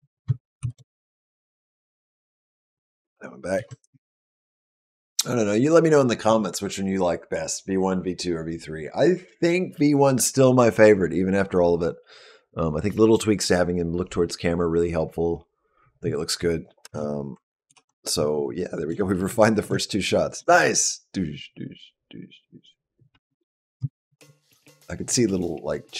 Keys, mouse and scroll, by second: 0.4 shift+Down, 2.0 click, 3.4 ctrl+b, 3.6 space, 16.6 space, 17.5 alt+p, 18.2-18.7 scroll down 3, 18.8 shift+middle click, 19.5 click, 20.2 space, 23.0 space, 23.6 click, 24.0 space.